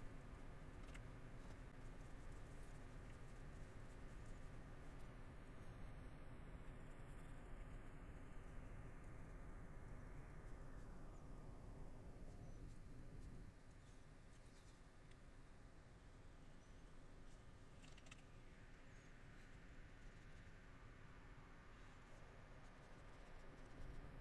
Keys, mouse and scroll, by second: 0.1 middle click, 0.6 middle click, 2.9 middle click, 3.6 middle click, 4.4 middle click, 5.2 middle click, 6.8 middle click, 8.6 middle click, 10.9 middle click, 12.7 middle click, 13.9 middle click, 14.4 middle click, 17.3 middle click, 18.2 middle click, 19.0 middle click, 20.5 middle click, 21.4 middle click, 22.2 middle click, 24.0 middle click.